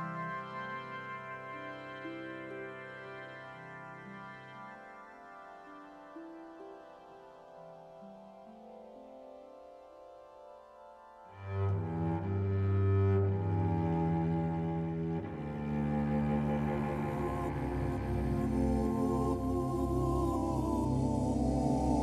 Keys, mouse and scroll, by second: 12.3 click.